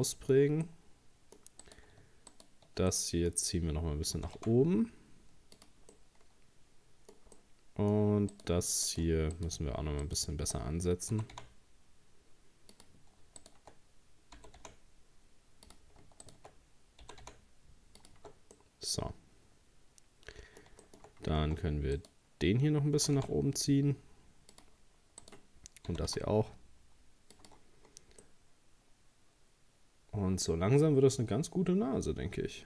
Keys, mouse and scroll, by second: 1.6 right click, 2.3 shift+right click, 2.9-4.2 middle drag, 4.2 g, 5.9-8.3 middle drag, 8.3 right click, 8.9 right click, 9.3 shift+right click, 10.0 shift+right click, 11.1 g, 13.4 shift+right click, 14.4 g, 16.2 shift+right click, 17.0 g, 18.2 Tab, 18.4 scroll down 1, 18.5-21.1 middle drag, 21.1-21.4 scroll up 1, 21.4 Tab, 22.0 right click, 23.0 g, 25.2 right click, 25.9 g, 27.4 Tab, 27.9-28.2 scroll down 2, 28.2-31.3 middle drag.